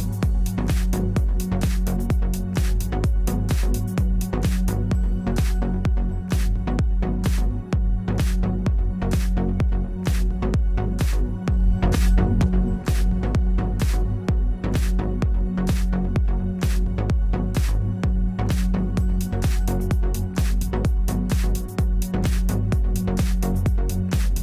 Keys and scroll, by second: 6.8 w, 14.2 0, 14.9 Return, 19.3 space, 20.2 space.